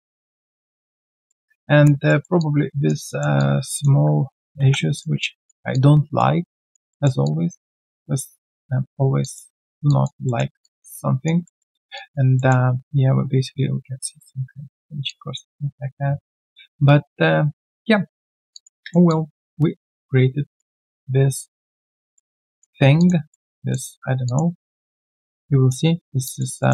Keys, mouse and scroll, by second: 0.8 1, 1.0 alt+click, 1.2 alt+middle click, 1.4 alt+click, 2.0 alt+middle click, 2.3 alt+click, 3.0 alt+middle click, 3.3 alt+click, 5.2 alt+click, 6.9 alt+middle click, 7.2 alt+click, 9.2 alt+click, 9.6 alt+middle click, 9.8 alt+click, 10.2 alt+middle click, 10.6 alt+click, 11.4 alt+middle click, 11.6 alt+scroll down 1, 11.9 alt+click, 12.3 alt+middle click, 15.0 alt+click, 17.8-18.3 scroll down 1, 18.5 alt+click, 18.7 alt+middle click, 19.0 alt+click, 20.8 alt+click, 22.1 alt+middle click, 22.4 alt+click, 22.9 alt+click, 23.3 alt+middle click, 23.5 alt+click, 24.2 alt+click, 24.5 alt+middle click, 24.9 alt+click, 26.2 alt+click, 26.6 alt+middle click.